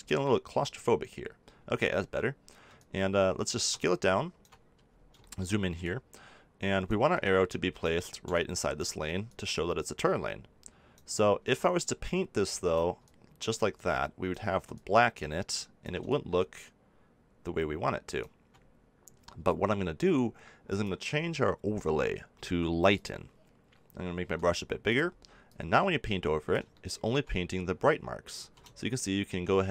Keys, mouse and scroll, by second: 0.1 click, 0.9-2.7 middle drag, 2.7-18.0 drag, 20.6-22.4 drag, 24.1 f, 24.9-27.6 drag, 28.3 ctrl+z.